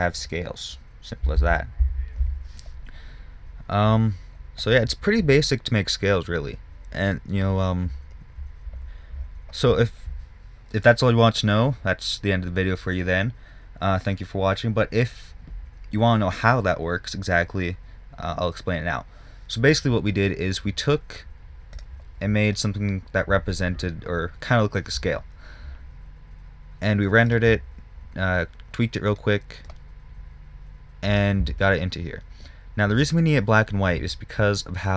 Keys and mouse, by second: 1.8 ctrl+z, 2.3 ctrl+z, 22.1-22.9 drag, 22.9-27.7 middle drag, 27.7-29.7 drag.